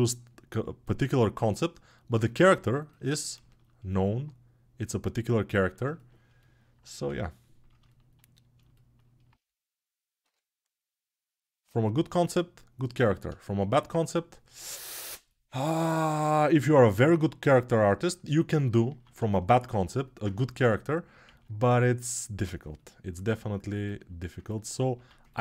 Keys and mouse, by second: 2.2-5.3 alt+right drag, 5.3 ctrl+alt+click, 5.5 alt+shift+right click, 5.9-12.8 alt+drag, 20.0-25.4 ctrl+alt+drag.